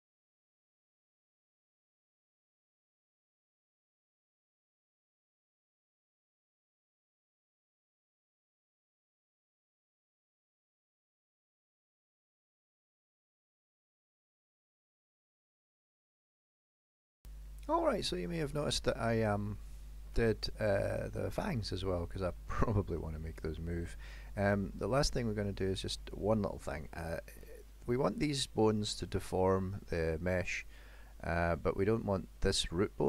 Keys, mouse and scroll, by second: 18.0-18.8 scroll up 5, 18.8 middle click, 19.4 shift+middle click, 20.4 middle click, 21.8-22.4 scroll down 3, 22.5 shift+middle click, 23.3 middle click, 24.3 shift+middle click, 27.1 click, 29.4 middle click, 30.9 middle click.